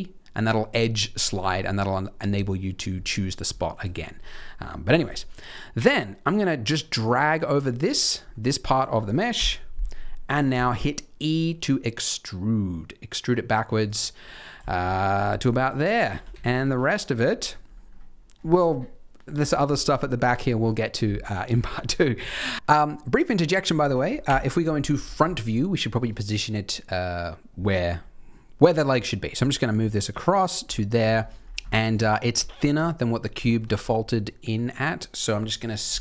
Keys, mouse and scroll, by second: 2.9-3.5 scroll up 2, 3.5 shift+middle click, 4.9 click, 5.4 click, 8.3 middle click, 9.3 KP_3, 9.8-10.4 scroll down 1, 10.4-11.3 scroll down 1, 10.4 e, 14.1-14.6 scroll up 2, 14.6 shift+middle click, 15.1 click, 15.4 click, 16.1 g, 17.3 scroll down 3, 17.6-18.5 scroll up 4, 19.7 scroll down 2, 20.3 scroll down 3, 21.1 scroll up 3, 21.5 shift+middle click, 21.8-22.5 scroll up 4, 23.0 middle click, 24.2 KP_1, 25.0 scroll down 4, 25.2 shift+middle click, 25.8 middle click, 28.7 scroll up 2, 29.3 g, 30.7 shift+middle click, 31.1-31.6 scroll up 5, 31.6 shift+middle click, 31.9 g, 33.4 shift+middle click, 33.7-34.4 scroll up 2, 35.8 s.